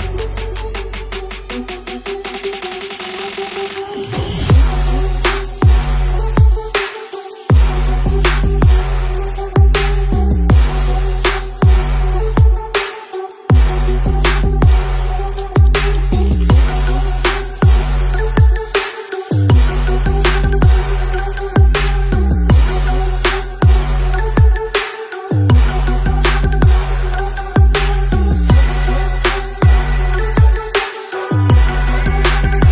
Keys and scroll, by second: 0.5 space, 0.6 space, 0.6 space, 8.2 space, 8.8 space, 10.0 space, 10.1 space, 10.6 space, 15.2 z, 15.4 space, 20.1-21.5 typing, 26.0 x, 27.8 ctrl+z, 28.3-30.9 typing.